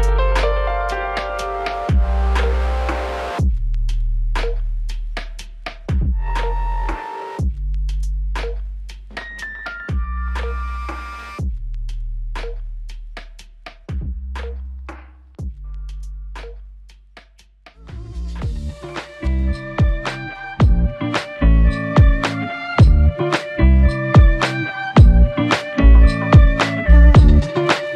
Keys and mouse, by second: 3.8 alt+click, 5.5 f, 6.4 double click, 11.8 shift+click, 14.6 shift+click, 16.3 alt+click, 18.7 double click, 19.6 shift+click, 24.4 alt+l, 25.0 ctrl+click, 26.0 ctrl+i, 26.6 shift+click, 27.8 ctrl+click.